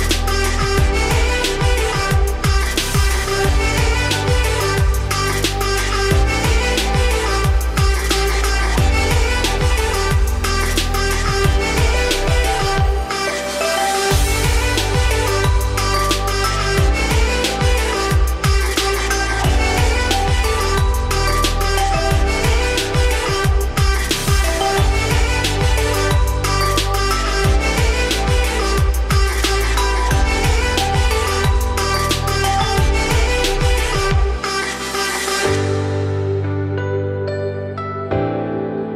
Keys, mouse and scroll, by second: 1.2 middle click, 1.8 z, 2.7 ctrl+b, 4.9 scroll down 1, 5.1-7.2 middle drag, 7.5-8.0 scroll down 3, 8.0 Tab, 10.9 click, 11.4 Tab, 11.7 scroll down 1, 11.8 middle click, 12.1 `, 12.7 z, 13.0-13.5 scroll up 2, 13.5 click, 13.9 1, 14.4-15.2 scroll up 3, 15.2 g, 16.7 z, 16.9 scroll down 4, 17.1 middle click, 17.5 Tab, 17.7 scroll up 2, 18.2 ctrl+s, 18.4 scroll down 1, 18.5-19.8 middle drag, 19.8-20.8 scroll down 2, 20.8-23.9 scroll up 4, 27.5 scroll down 2, 27.7 Tab, 28.4 `, 28.9 z, 29.4 click, 30.4 scroll down 3, 30.6 z, 30.9 scroll up 4, 31.1 x, 32.2 scroll down 1, 32.3 middle click, 32.7 Tab, 33.3 click, 33.8 middle click, 34.2 Tab, 34.5-37.2 typing, 35.4 click.